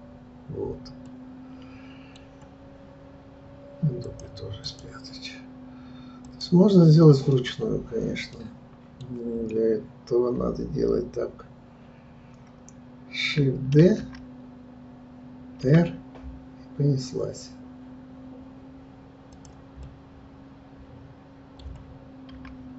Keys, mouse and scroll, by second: 1.0-4.0 middle drag, 4.0-6.2 drag, 8.4-13.8 middle drag, 13.8 shift+d, 19.8-22.7 middle drag.